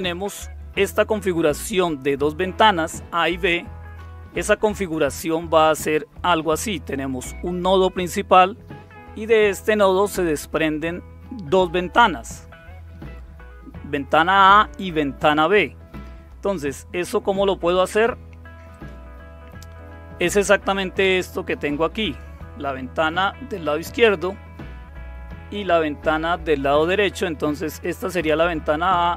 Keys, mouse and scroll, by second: 3.9 Right, 18.7 click, 22.0 click, 25.5 click, 27.7 click, 28.5 click.